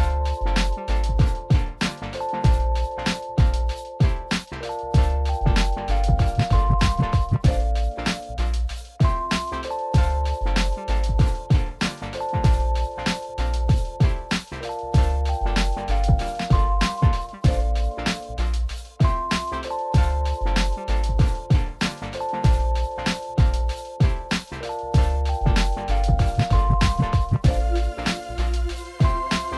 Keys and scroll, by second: 14.9 ctrl+z.